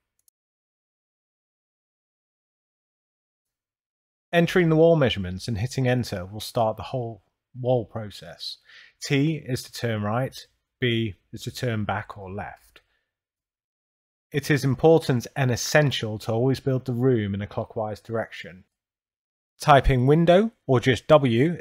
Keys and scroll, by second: 4.2 2, 5.1 Return, 7.2 t, 8.0 Return, 9.6 Left, 10.4 Delete, 11.7 b, 12.1 Return, 13.6 Left, 14.1 Delete, 15.5 t, 16.1 Return, 17.7 2, 18.6 Return, 20.3 w, 20.7 Return.